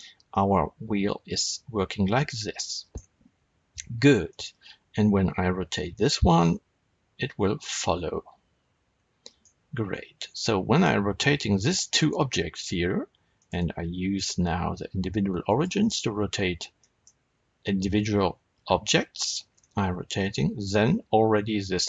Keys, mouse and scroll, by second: 2.8 right click, 4.2 click, 5.5 r, 9.3 right click, 10.6 shift+click, 13.3-16.7 drag, 16.7-21.8 middle drag, 19.4 r.